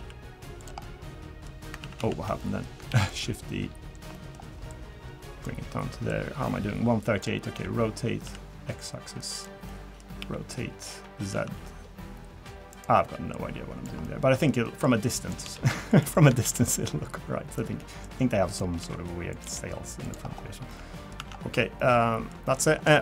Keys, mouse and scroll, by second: 0.8 middle click, 1.8 ctrl+z, 2.0 ctrl+z, 2.4 middle click, 2.9 shift+d, 4.1 middle click, 4.7 click, 6.1 click, 7.5 r, 9.7 middle click, 10.2 r, 13.3 click, 14.0 middle click, 14.8 click, 15.4 s, 16.4 shift+d, 17.0 click, 18.0 click, 18.8 r, 19.4 g, 20.2 scroll down 3, 20.5 Tab, 20.7 middle click, 21.2 Tab, 21.3 scroll up 1, 21.4-21.8 scroll down 3, 21.8 middle click, 22.4 middle click, 22.7-23.0 scroll up 4, 22.9 shift+middle click.